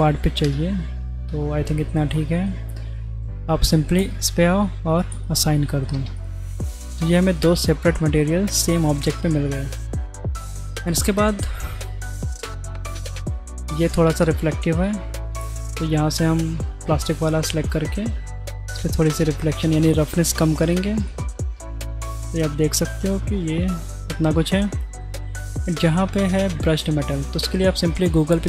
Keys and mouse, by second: 0.4 ctrl+KP_Add, 2.1 click, 4.0 click, 5.1 click, 6.0 Tab, 6.2 click, 6.5-6.9 drag, 6.9-7.5 middle drag, 8.9 shift+right click, 9.1 shift+click, 9.7 middle click, 10.1 n, 10.7 click, 12.0 click, 12.7-13.6 drag, 14.7 click, 17.7-20.8 drag, 21.2-21.8 drag, 21.8-24.5 middle drag, 25.3-25.8 shift+drag.